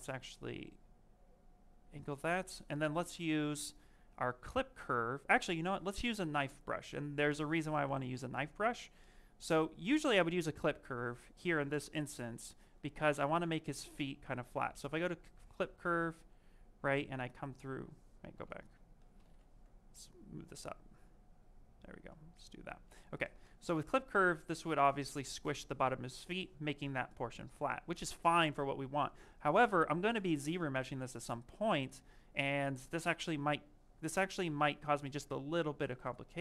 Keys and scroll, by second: 1.7 q, 10.1 ctrl+z, 16.2 ctrl+shift+space, 17.9 ctrl+z, 18.2 ctrl+z.